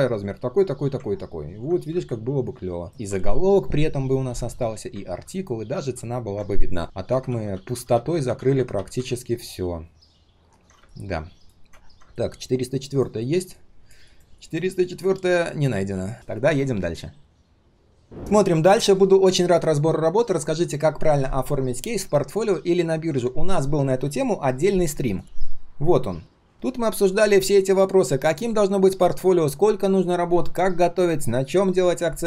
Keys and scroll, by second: 5.1 ctrl+z, 5.7 ctrl+z, 7.2 ctrl+z, 7.5 ctrl+z, 7.7 ctrl+z, 16.1 ctrl+s.